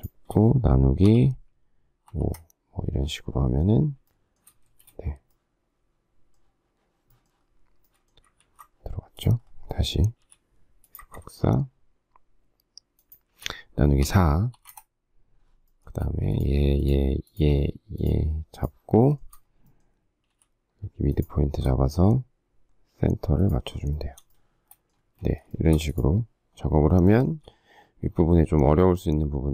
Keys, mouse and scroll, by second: 2.2 Return, 2.2 5, 4.6 space, 8.4 ctrl+z, 10.2 m, 12.9 shift+click, 15.8 Return, 15.8 space, 16.8 shift+click, 17.2 shift+click, 17.3 shift+double click, 18.0 shift+click, 18.5 shift+click, 19.0 shift+middle click, 20.3 m, 23.4 shift+click, 23.7 shift+scroll, 23.9 shift+middle click, 24.9 space, 25.5 shift+middle click, 27.0 shift+middle click.